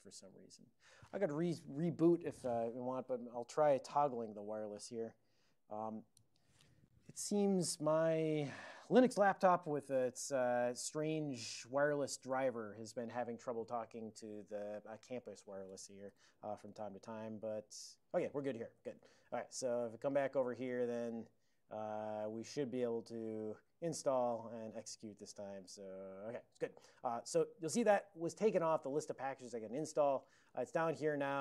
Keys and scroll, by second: 16.1 ctrl+p, 16.7 Return, 18.8 ctrl+c, 19.7 super+h, 19.8 super+j, 20.4 super+;, 20.8 super+j, 21.1 super+j, 23.4-24.8 typing, 28.6 ctrl+x, 28.9 1, 30.3 alt+>, 31.3 ctrl+r.